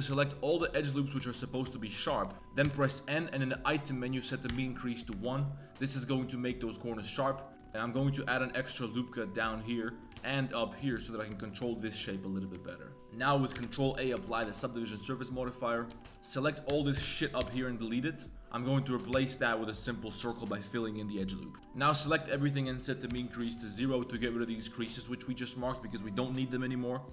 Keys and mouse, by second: 0.3 alt+shift+click, 0.8 alt+shift+click, 1.3 alt+shift+click, 1.7 alt+shift+click, 2.2 shift+click, 2.3 n, 2.6 n, 4.0 click, 5.1 Tab, 5.2 middle drag, 7.3 drag, 7.5 Tab, 7.8 ctrl+r, 9.9 click, 10.1 ctrl+r, 11.3 shift+drag, 11.6 Tab, 12.1 drag, 12.5 shift+drag, 12.9 Tab, 13.3 click, 13.6 ctrl+a, 14.1 Tab, 14.2 middle click, 14.5 shift+middle drag, 14.9 2, 15.1 middle click, 15.4 middle click, 15.9 1, 16.0 ctrl+KP_Add, 16.0 a, 16.0 3, 16.0 b, 16.9 ctrl+KP_Add, 17.4 x, 18.3 ctrl+z, 18.3 middle click, 18.3 f, 19.1 f, 22.2-23.3 drag, 22.2 2, 22.2 a, 23.7 middle click, 24.0 2, 24.9 click, 27.0 click.